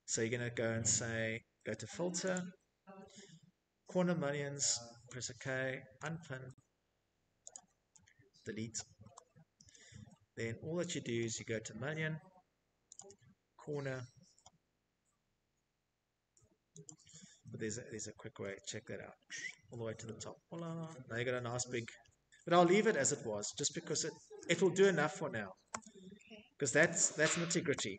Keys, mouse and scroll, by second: 0.0 click, 0.3 right click, 2.9 right click, 3.0 click, 6.8 Delete, 10.6 click, 14.5 click, 16.1 click, 16.1-16.8 scroll, 17.7 middle click, 18.1-18.9 scroll, 18.9 Escape, 19.2 Escape, 19.3 Escape, 19.7 middle click, 20.5-22.2 typing, 23.4-24.5 typing, 23.8 scroll, 25.8 typing, 26.6 middle click, 26.7 middle click, 26.8-27.9 middle click, 27.1 Escape, 27.4 Escape, 27.6 Escape, 27.7 click.